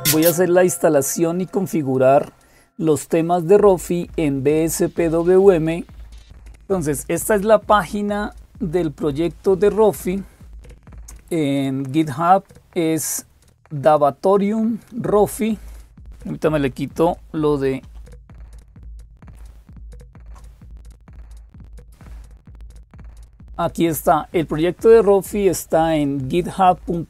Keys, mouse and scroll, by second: 0.0-27.0 typing, 8.5-10.6 scroll up 2, 10.6-15.4 scroll up 1, 15.4 click, 17.6 super+f, 19.6 super+t.